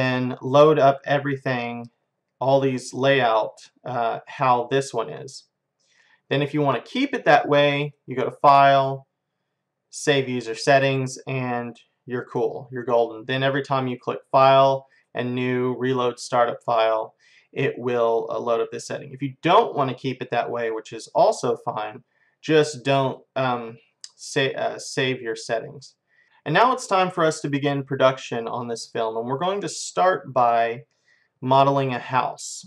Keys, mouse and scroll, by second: 7.8-9.7 drag, 13.9-15.8 drag, 23.1-26.2 drag, 29.0-32.6 middle drag.